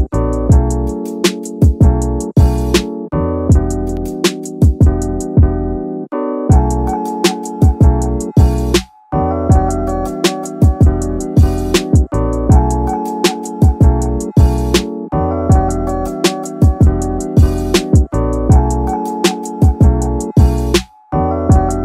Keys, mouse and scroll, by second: 0.4 shift+click, 1.4 shift+middle click, 2.7 shift+click, 3.6 shift+click, 4.5 shift+click, 5.4 scroll down 2, 5.6 shift+middle click, 6.9 e, 8.8 z, 10.9 z, 12.3 click, 12.8-13.1 scroll down 1, 13.5 Tab, 13.8-14.1 middle drag, 14.3 scroll down 2, 14.5 middle drag, 14.9 middle click, 15.6 KP_3, 17.0 click, 18.3 click, 19.2 s, 19.6 y, 21.3 click.